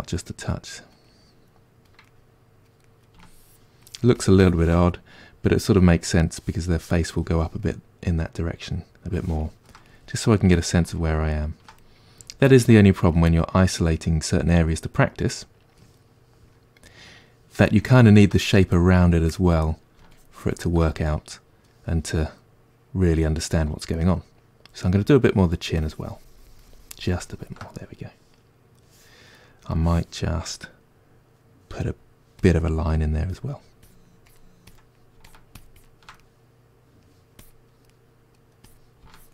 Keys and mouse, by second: 0.2-1.3 middle drag, 1.3 click, 2.1-3.2 middle drag, 3.2-4.9 shift+drag, 4.9-12.0 middle drag, 12.0-13.2 drag, 13.2-14.8 middle drag, 14.8-16.1 drag, 16.1-19.1 middle drag, 19.1-21.0 drag, 21.0-22.6 middle drag, 22.6 click, 23.5 middle click, 24.3-27.8 drag, 27.8-29.8 middle drag, 29.8 click, 30.2-33.4 middle drag, 31.7 f, 33.4-36.2 drag, 36.2-37.5 middle drag, 37.5 click, 37.9 middle click, 38.7-39.3 drag.